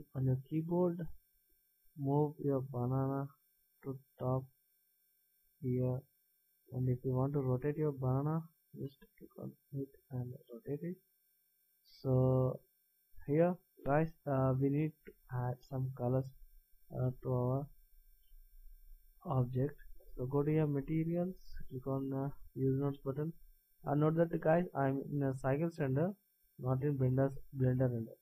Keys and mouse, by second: 1.5-2.4 drag, 6.3-7.8 middle drag, 8.7 r, 8.8-10.5 middle drag, 11.7-12.9 middle drag, 20.9-22.7 drag, 22.9-24.8 drag, 25.4-27.4 drag.